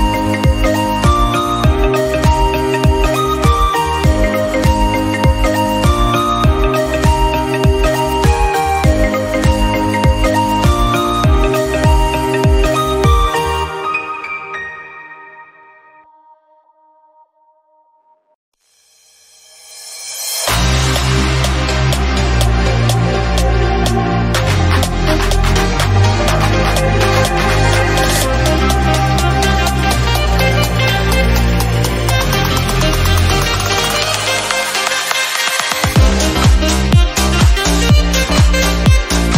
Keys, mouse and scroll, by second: 0.2 Tab, 0.2-0.8 scroll down 3, 0.8 middle click, 1.2 scroll down 1, 1.4 click, 1.5 middle click, 1.9-2.4 scroll up 2, 2.4 KP_7, 2.8 shift+middle click, 6.3 shift+a, 9.9-10.3 scroll down 1, 10.3 /, 10.7-11.9 shift+middle drag, 11.9 s, 13.7 Tab, 14.1 1, 14.2 click, 14.6 shift+middle click, 14.9 scroll down 1, 15.0 shift+middle click, 15.4 Tab, 15.9 click, 16.9 shift+middle click, 17.0 Tab, 17.3 shift+middle click, 17.5 click, 17.9 ctrl+r, 18.9 click, 19.5 click, 20.1 s, 21.3 shift+middle click, 22.2 click, 22.7 shift+middle click, 23.3 s, 23.9 shift+middle click, 24.2 click, 24.7 s, 25.2 scroll down 3, 25.3 shift+middle click, 25.5 scroll up 1, 25.7 shift+middle click, 26.3 click, 26.5 a, 26.8 e, 27.3 middle click, 27.7 click, 28.3 middle click, 28.5-28.9 scroll up 1, 28.9 KP_7, 29.2 click, 29.6 ctrl+r, 30.1 scroll down 2, 30.2 middle click, 30.4 scroll up 1, 30.6 middle click, 31.2 2, 31.4 shift+middle click, 31.5 click, 32.2 shift+middle click, 32.7 scroll up 1, 32.8 shift+middle click, 33.9 click, 34.9-35.9 middle drag, 36.2 click, 36.6 ctrl+b, 37.3 ctrl+z, 37.6 Tab, 37.9 click, 38.1 right click, 38.9 ctrl+a.